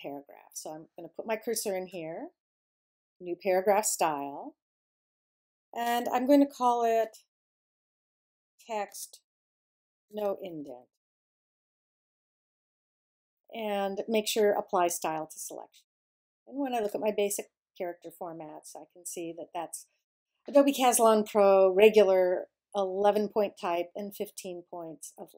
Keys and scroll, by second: 6.2-11.8 typing.